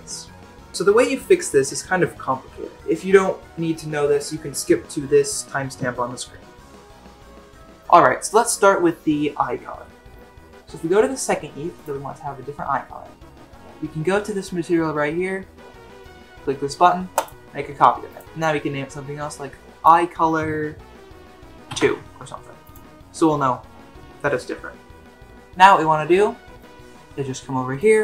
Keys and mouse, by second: 11.8 click, 17.2 click, 18.2-22.6 drag, 27.7-28.0 drag.